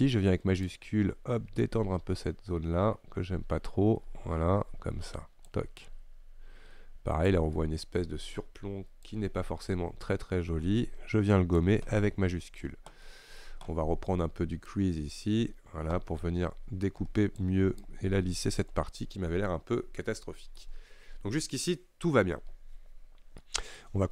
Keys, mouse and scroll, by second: 0.7-3.8 shift+drag, 5.9-7.6 shift+drag, 7.6 middle click, 8.4-9.1 scroll up 1, 9.1-12.0 shift+drag, 12.0-14.8 middle drag, 14.8-19.1 drag, 19.1-19.5 scroll down 4, 19.5-20.7 middle drag, 20.7-21.0 scroll up 1, 21.0-21.3 scroll down 2, 21.3-23.0 scroll up 4, 23.0-23.5 scroll down 2, 23.5-24.1 middle drag.